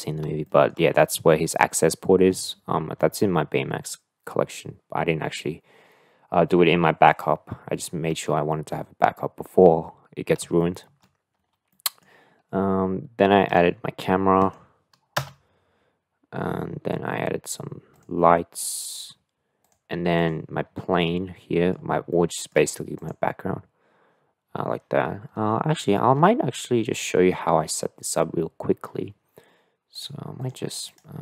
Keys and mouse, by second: 0.5 shift+middle click, 8.5-9.6 middle drag, 10.6 shift+middle click, 11.7-12.0 middle drag, 14.4 click, 15.2 KP_0, 18.5 click, 19.6-20.2 drag, 21.0-21.7 middle drag, 22.0-22.4 shift+middle drag, 30.4 click.